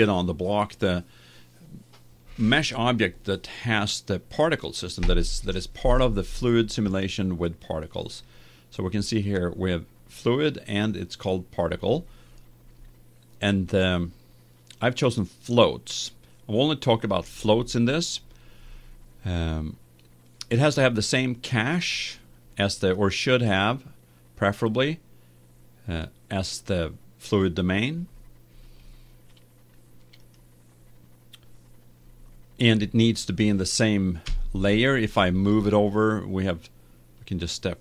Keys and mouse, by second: 8.2-10.0 drag, 22.9-24.7 right drag, 24.7 middle click, 24.8-25.9 drag, 30.1-32.1 right drag, 34.2 KP_1.